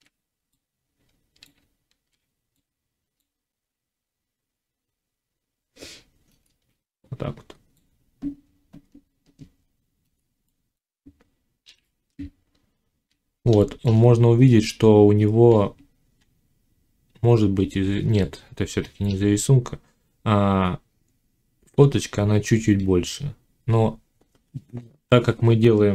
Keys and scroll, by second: 1.5 z.